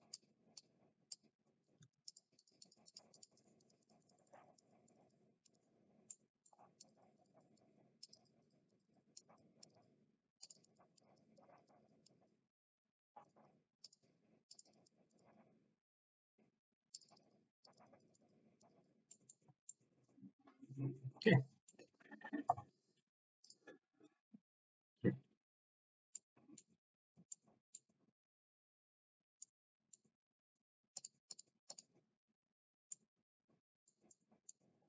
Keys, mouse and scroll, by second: 0.5 middle click, 1.9 ctrl+z, 2.0 middle click, 2.3 middle click, 2.6 middle click, 2.9 click, 3.1 middle click, 3.6 middle click, 4.1 middle click, 4.8 click, 4.9 middle click, 5.4 click, 6.1 middle click, 6.7 click, 7.1 click, 7.6 click, 8.0 click, 8.2 click, 8.7 click, 9.2 middle click, 9.5 middle click, 10.4 middle click, 10.9 middle click, 11.1 click, 11.3 middle click, 11.5 click, 11.7 click, 11.7 middle click, 13.2 middle click, 13.8 click, 14.5 click, 15.1 click, 17.1 click, 17.6 click, 18.2 click, 18.6 click, 19.1 middle click, 19.7-21.3 middle drag, 21.7 middle click, 31.2-32.5 drag, 32.9-33.9 middle drag, 34.1-34.5 middle drag.